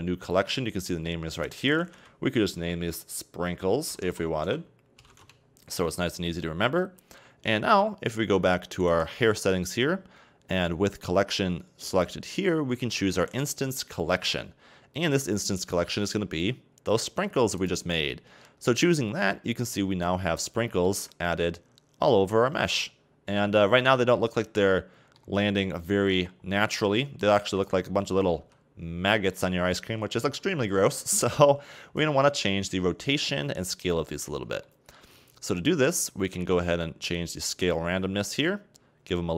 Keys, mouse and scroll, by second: 1.3-4.4 drag, 8.1 right click, 10.3-12.2 scroll down 1, 12.2-15.4 scroll down 3, 15.6-18.6 drag, 18.9-19.8 scroll up 5, 19.8-20.2 shift+middle drag, 20.2-20.7 scroll up 2, 20.7 a, 21.0 a, 22.4-22.7 scroll down 2, 22.7-25.5 middle drag, 25.5 scroll down 4, 25.6-26.2 middle drag, 26.2-27.5 scroll up 4, 27.5 right click, 28.2 a, 28.4 a, 29.2 scroll down 3, 29.3-31.5 middle drag, 31.5-33.6 scroll up 1, 33.6-34.6 scroll up 2, 34.6-35.8 shift+middle drag, 35.8-36.1 scroll down 2, 37.1-39.3 drag.